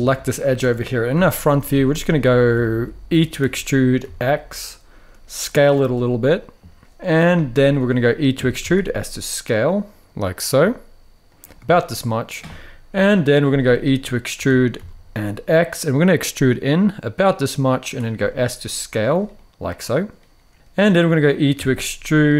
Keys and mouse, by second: 0.1 alt+shift+click, 0.8 KP_1, 1.5 shift+middle click, 2.3 shift+middle click, 3.1 e, 3.7 x, 5.5 s, 7.0 middle click, 8.1 e, 8.3 s, 11.0 click, 11.5 middle click, 13.4 middle click, 14.0 e, 14.5 x, 17.5 click, 17.8 s, 18.7 click, 19.0 middle click, 20.5 middle click, 21.3 e.